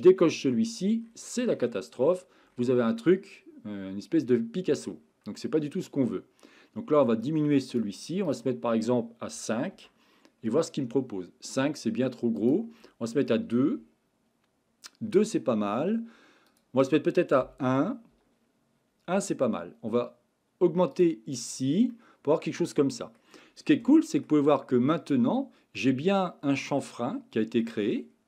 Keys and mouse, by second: 3.0-4.7 middle drag, 7.2 click, 8.4-9.8 drag, 12.4-13.8 drag, 16.5-18.1 drag, 20.9 click, 21.9-23.2 middle drag, 23.9-24.2 shift+middle drag, 25.8-27.6 middle drag.